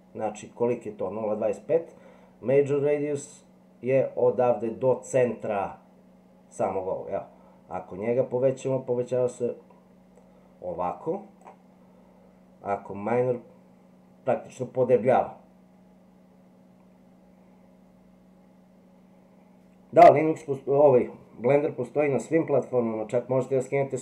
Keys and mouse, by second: 7.7-11.4 drag, 12.7-24.0 drag.